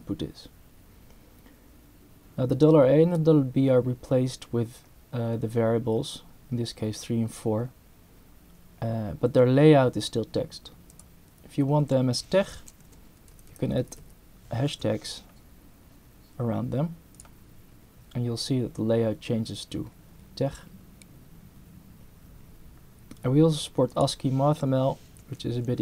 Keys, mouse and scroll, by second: 10.9 click, 12.8 3, 13.3 Right, 14.7 3, 17.1 click, 23.9 click, 25.7 2.